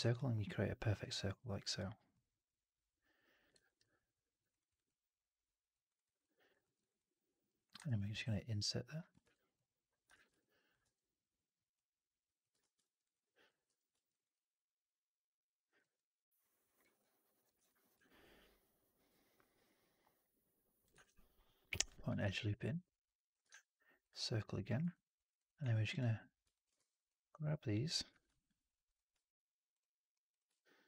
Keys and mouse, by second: 0.0-1.6 alt+drag, 2.3-3.4 middle drag, 3.5 alt+right click, 3.7 alt+click, 4.4 alt+right click, 4.6 alt+right click, 4.7 alt+click, 5.7 alt+right click, 5.9 alt+right click, 6.1 alt+click, 6.5 alt+middle click, 6.7 alt+right click, 6.8 alt+click, 7.7 ctrl+e, 8.1 w, 9.1 ctrl+e, 10.0 shift+x, 10.3 alt+click, 10.7 w, 12.5 shift+x, 12.9 alt+right click, 13.0 alt+click, 13.5 4, 14.0 alt+right drag, 14.2-15.6 alt+drag, 15.8-16.7 middle drag, 16.9-17.3 alt+drag, 17.4 1, 17.9-20.7 alt+drag, 20.9 shift+f, 22.0 w, 22.2-23.2 alt+drag, 23.4 shift+Tab, 24.8 alt+click, 26.4 alt+click, 26.6 shift+f, 28.0 w, 28.8 click, 29.6-30.8 drag.